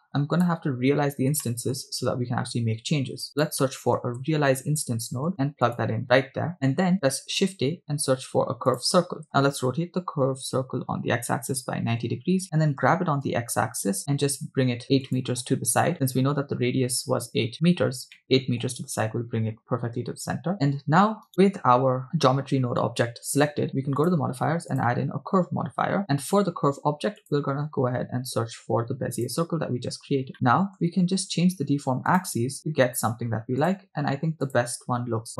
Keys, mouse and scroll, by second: 1.5 shift+middle drag, 3.2 shift+a, 6.5 shift+middle click, 7.4 shift+a, 9.5 r, 10.6 x, 11.2 9, 11.4 0, 11.9 Return, 13.2 g, 13.3 x, 15.1 ctrl+click, 17.4 scroll up 3, 18.2-18.7 shift+middle drag, 21.3 right click, 22.5 scroll down 2, 24.0 click, 24.7-26.0 drag, 27.2 click, 30.3 middle click, 32.3-32.6 drag, 33.6-34.7 drag.